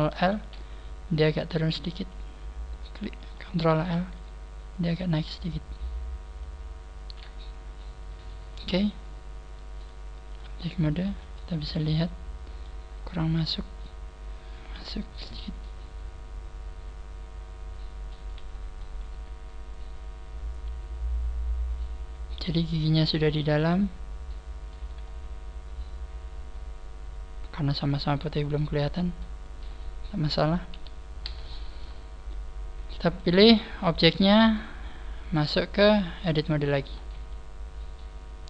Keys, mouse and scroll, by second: 0.0 ctrl+l, 1.1 click, 2.8 right click, 3.7 ctrl+l, 4.6 click, 10.3 click, 11.0 z, 11.2 middle click, 12.8 click, 12.8 scroll down 4, 13.8 click, 15.3 middle click, 16.0 click, 18.1 z, 18.4-18.9 scroll up 2, 18.9 middle click, 24.8 z, 25.1 middle click, 30.6 KP_1, 31.4 middle click, 32.0-32.4 scroll down 3, 32.9 middle click, 32.9 right click, 32.9 scroll down 1, 34.4 click, 35.2 click, 36.4 click, 36.9 z, 37.2 middle click.